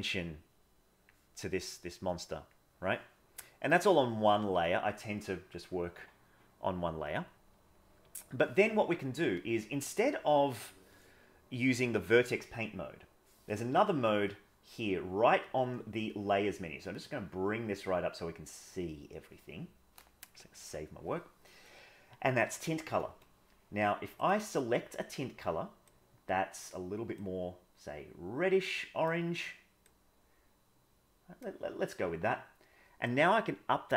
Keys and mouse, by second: 0.2 click, 1.7 click, 4.3 middle click, 6.8 middle click, 7.9 middle click, 10.0 click, 16.9-19.2 drag, 20.6 ctrl+s, 24.2 click, 33.1-33.9 drag.